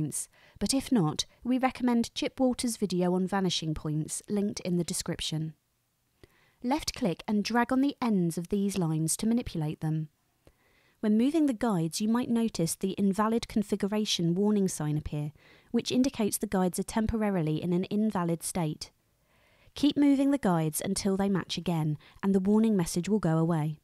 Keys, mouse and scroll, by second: 8.1-11.0 drag, 12.2-15.5 drag, 17.2-19.3 drag, 20.3-23.8 drag.